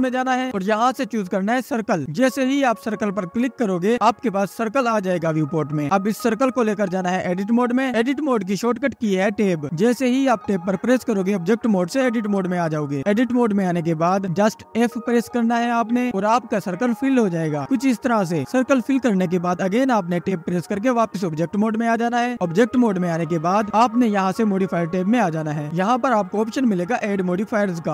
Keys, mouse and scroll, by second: 4.9-6.5 scroll up 7, 6.5 click, 16.2-16.5 scroll up 2, 17.4 scroll up 3, 18.5 click, 20.3 scroll down 1, 26.3 click.